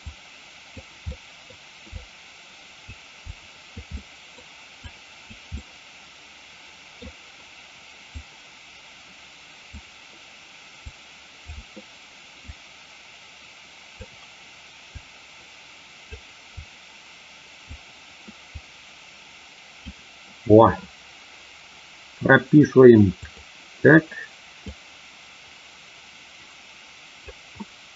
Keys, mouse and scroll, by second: 0.0 click, 1.0 middle click, 1.9-2.9 drag, 3.1 click, 3.9 middle click, 4.8 click, 5.4-6.9 middle drag, 8.1-9.6 drag, 10.8 click, 12.4-13.9 drag, 14.9-16.0 drag, 16.6-17.8 drag, 18.4-19.9 drag, 23.3 click, 24.6-27.3 drag.